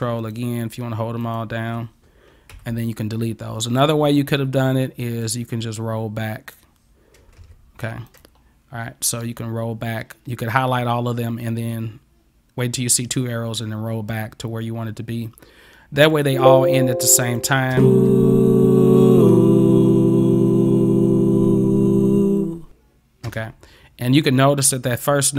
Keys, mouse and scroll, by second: 0.2 ctrl+click, 1.3 ctrl+click, 3.8 click, 5.2-6.6 drag, 7.4 ctrl+x, 8.1 click, 16.1 click, 17.2 click, 17.7 space, 23.3 space.